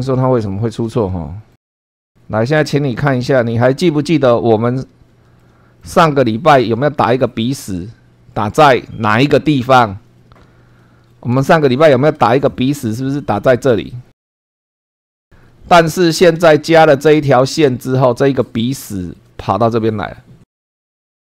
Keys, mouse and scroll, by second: 1.1 shift+middle click, 1.9-3.6 middle drag, 3.7 shift+middle click, 4.6 scroll up 2, 5.4 shift+middle click, 6.2 shift+scroll up 3, 9.8-10.4 scroll down 2, 10.8 shift+middle click, 11.4 shift+middle click, 12.2 shift+middle click, 15.6-16.2 scroll down 4, 16.5 shift+middle click, 18.0-18.4 scroll up 2, 18.9 shift+middle click, 20.6 scroll down 1, 21.1 click.